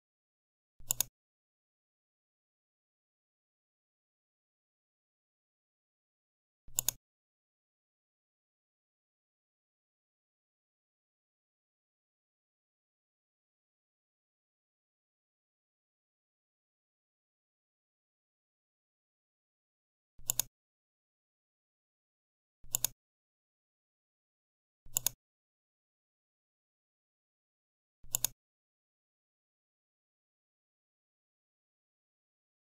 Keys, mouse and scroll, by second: 0.7 click, 6.6 click, 20.1 click, 28.0 click, 32.6 click.